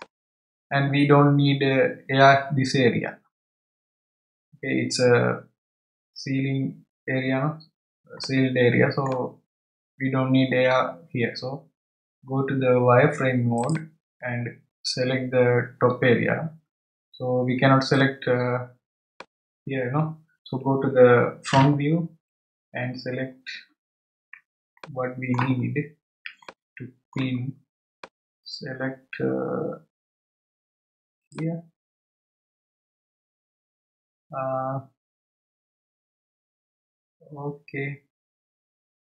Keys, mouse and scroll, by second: 8.2-11.2 middle drag, 13.6 click, 17.9 click, 23.4 scroll up 1, 24.8-25.4 shift+middle drag, 25.4 shift+scroll up 1, 26.4-28.0 shift+middle drag, 28.0 click, 32.1-32.5 scroll up 2, 32.8 scroll up 1.